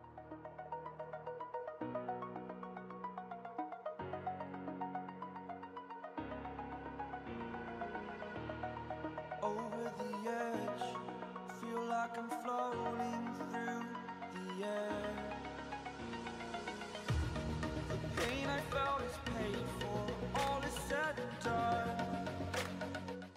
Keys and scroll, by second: 0.2 [, 0.7 [, 1.3 ctrl+z, 3.7-4.1 typing, 4.3 ctrl+z, 5.5 ctrl+z, 6.6 ctrl+z, 7.4 [, 7.7 [, 8.5 ctrl+z, 9.3 ctrl+z, 10.4 ctrl+z, 11.1 Delete, 11.5 \, 11.6 \, 11.6 ], 14.1 ctrl+z, 15.2 ctrl+z, 15.5 ], 15.6 ], 16.4 ], 16.4 ].